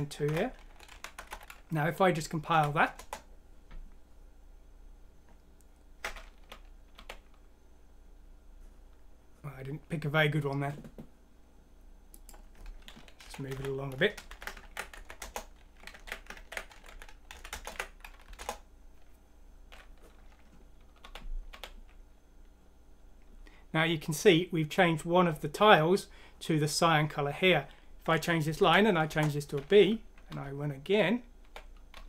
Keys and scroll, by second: 0.0-0.3 typing, 1.3 ctrl+z, 2.5 F6, 3.0 Return, 6.4-6.9 typing, 13.5 End, 14.0 Home, 14.3 End, 14.6 ctrl+x, 14.9 End, 15.2 Return, 15.9 ctrl+z, 16.3 ctrl+z, 16.9 End, 17.5 Return, 17.7 ctrl+v, 18.2 ctrl+F6, 18.4 ctrl+Return, 21.0-21.5 typing, 27.7 0, 28.6 F6, 29.1 Return, 30.3 typing, 31.9 typing.